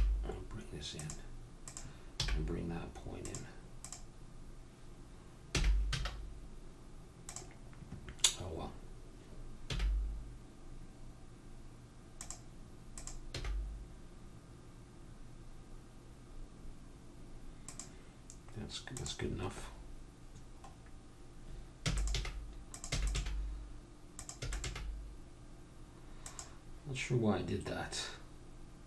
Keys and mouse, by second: 1.6-5.6 drag, 2.2 g, 5.5 g, 9.7 g, 13.0-15.1 drag, 13.4 g, 17.6-18.9 middle drag, 18.9-20.8 drag, 20.8-22.0 middle drag, 21.9 e, 22.2 g, 22.9 e, 23.1 g, 24.4 e, 24.7 g.